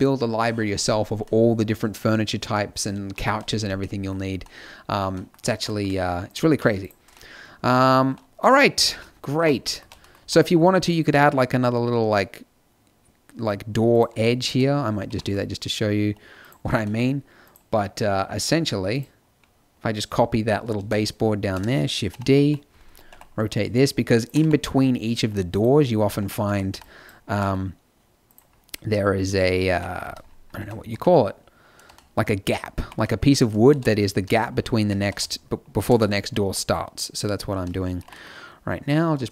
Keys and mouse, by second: 3.2 a, 6.2-8.8 middle drag, 8.8 z, 9.3 a, 10.1 z, 13.9-16.3 drag, 15.0 g, 16.6 z, 17.4-20.1 drag, 20.7 shift+d, 22.1 KP_7, 22.4 KP_5, 23.0 r, 24.3 g, 26.2 Tab, 26.5 a, 26.6 b, 27.2 g, 29.6 KP_1, 30.0 z, 30.5 Tab, 30.8 z, 32.7 g, 34.8 g, 36.0 Tab, 36.8 click, 37.9 g, 38.5 middle click.